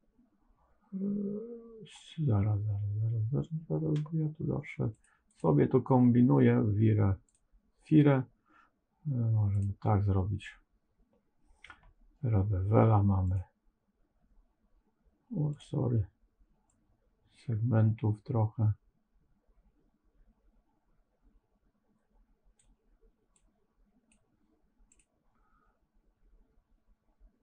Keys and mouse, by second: 5.3-7.9 drag, 13.3-15.5 drag, 16.7-22.5 drag, 23.2 click, 24.9-27.4 drag.